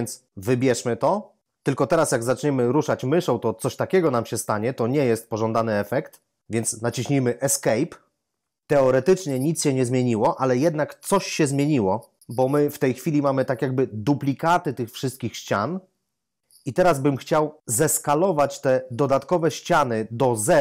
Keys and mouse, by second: 0.5 click, 7.7 Escape, 14.4 g, 16.6 Escape.